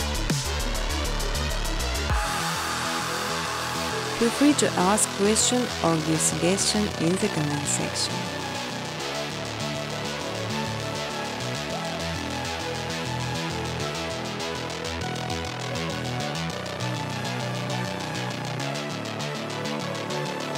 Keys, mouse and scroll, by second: 0.2 space, 1.0 space, 1.5 space, 2.2 space, 2.7 scroll, 3.6 click, 4.1-4.4 scroll, 7.0 click, 8.4 middle click, 8.5 scroll, 8.9 space, 11.9 space, 12.5-12.8 scroll, 13.3 click, 13.8 click, 14.0 right click, 15.2 click, 16.0 click, 16.5 click, 17.1 click, 18.0 click, 18.8 click, 19.1 click, 19.3 right click.